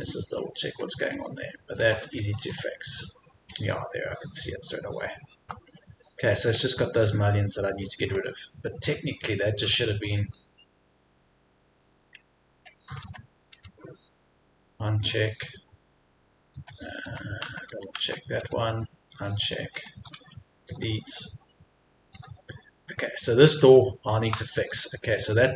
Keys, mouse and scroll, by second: 0.3-1.3 scroll up 1, 5.1 shift+middle click, 5.7-6.1 scroll down 1, 7.8-8.2 scroll up 1, 10.1 click, 11.1-11.7 scroll up 1, 11.7 Escape, 12.5 Tab, 18.4-23.3 drag, 20.7 Delete, 23.3 scroll down 1, 24.3 Escape, 24.5-25.1 scroll down 1, 25.2-25.5 scroll up 1.